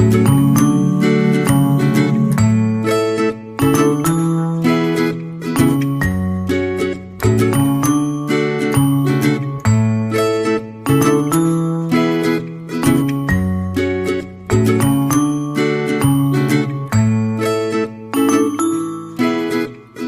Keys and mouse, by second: 0.5 c, 2.6 g, 4.3 right click, 4.5 c, 6.9 g, 8.1 c, 10.2 g, 12.7 c, 14.1 g, 15.5 r, 17.1 alt+z, 17.9 Tab, 18.7 Tab, 19.3 ctrl+r.